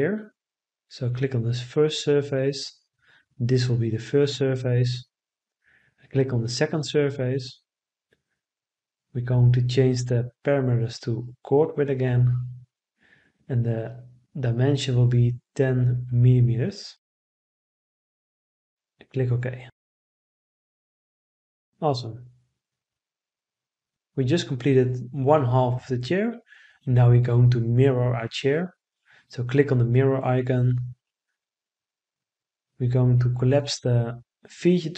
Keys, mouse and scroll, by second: 1.5 right click, 7.8 right click.